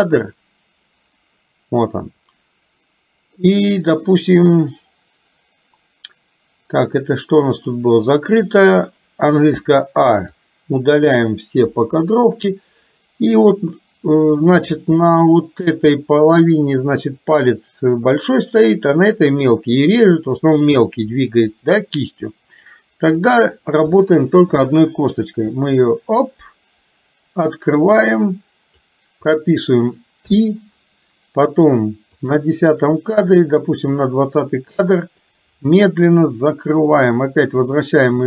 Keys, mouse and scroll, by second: 7.6 click, 8.7 click, 9.7 a, 10.3 click, 11.7 Delete, 14.7 shift+middle click, 24.1 shift+middle click, 25.6-28.8 drag, 30.3 i, 32.2 click, 34.1 click, 35.3-38.2 drag.